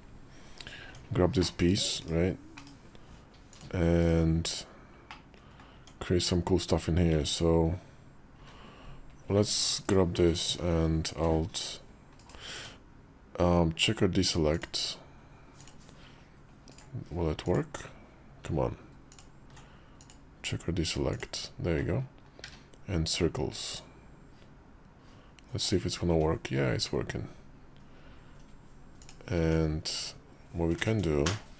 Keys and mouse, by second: 0.7 Tab, 1.4 /, 1.9 /, 2.6 Tab, 3.4 click, 3.9 /, 4.9 middle click, 5.6 Tab, 8.2 ctrl+r, 12.1 ctrl+b, 12.4 Tab, 14.6-16.7 drag, 17.4-18.4 drag, 19.0 alt+click, 19.8-21.1 drag, 22.3 q, 29.2 Tab.